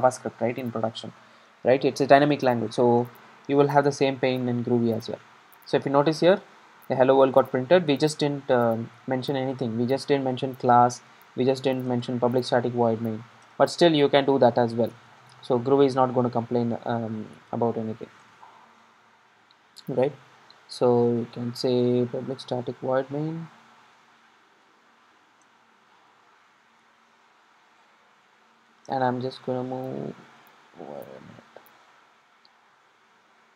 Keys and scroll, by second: 22.6 Tab, 25.8 ctrl+shift+super+Up.